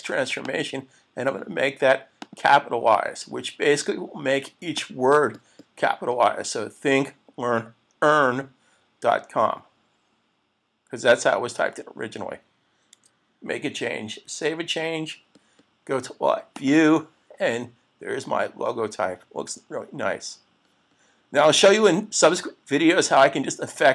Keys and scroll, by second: 14.2 super+s.